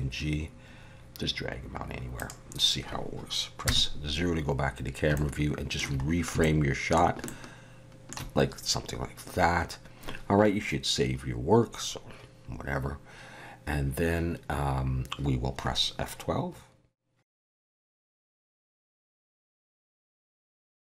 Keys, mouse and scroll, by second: 3.7 KP_0, 4.8-5.1 scroll down 1, 5.2 shift+middle click, 6.1 scroll up 1, 6.4 shift+middle click, 7.2 shift+middle click.